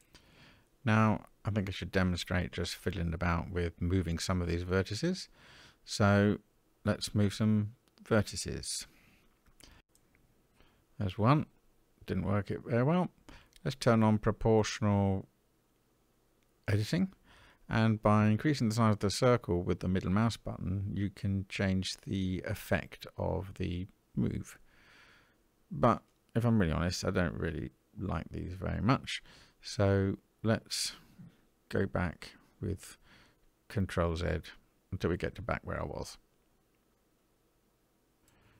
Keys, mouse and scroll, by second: 4.9 middle click, 6.0 click, 7.9 g, 12.4 o, 14.1 g, 23.5 middle click, 24.2 scroll up 1, 24.2 middle click, 25.2 click, 26.5 g, 28.8 o, 29.8 g, 31.6 scroll down 1, 31.9-33.9 middle drag, 35.4 ctrl+z, 35.9 ctrl+z, 36.9 ctrl+z, 37.4 ctrl+z, 38.4 middle click.